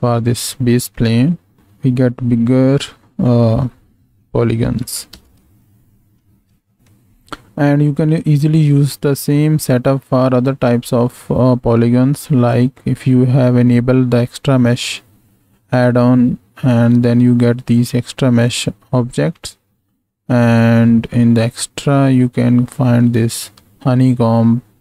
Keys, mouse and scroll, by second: 1.5-6.0 drag, 5.4 space, 6.5 space, 12.5-24.8 drag.